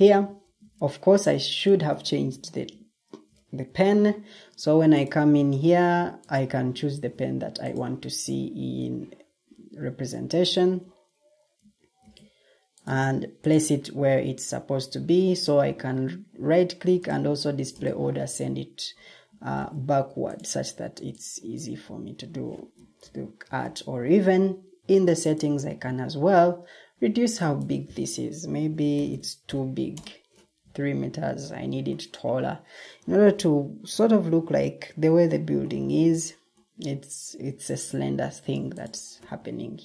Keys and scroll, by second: 0.5 ctrl+t, 0.7 Escape, 2.6 ctrl+t, 3.1 ctrl+t, 8.5 Escape, 11.9 ctrl+d, 19.5 ctrl+d, 23.4 ctrl+t, 28.7-29.5 typing, 29.8 Return, 31.3 Escape.